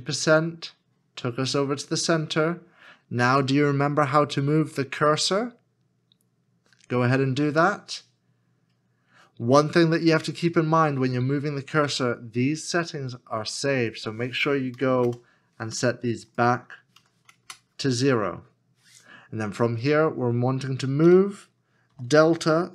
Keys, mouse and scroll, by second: 14.8 KP_0, 15.0 Return, 17.0 KP_0, 17.4 Return, 21.0-22.7 typing.